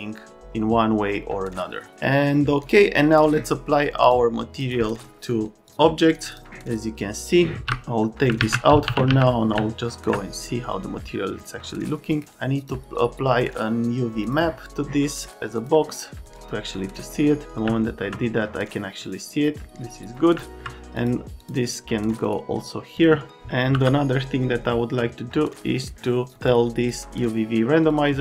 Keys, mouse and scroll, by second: 4.6 click, 5.6 ctrl+click, 6.3 click, 7.2 click, 8.2-9.6 typing, 9.5 alt+middle click, 10.4 click, 17.0 middle click, 17.6 middle click, 20.3 alt+middle click, 21.0 middle click, 23.7 m.